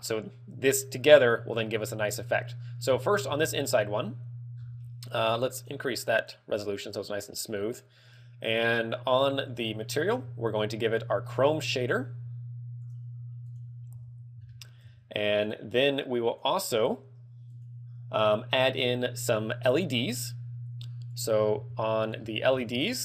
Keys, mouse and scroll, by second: 2.4 z, 2.9 scroll up 1, 3.2 shift+middle click, 3.5 z, 4.7 scroll down 4, 5.7 click, 6.3 click, 9.6 click, 11.1 click, 21.3 click, 22.0 shift+middle click, 22.1 shift+middle click, 22.4-22.9 scroll up 2, 22.9 scroll up 1.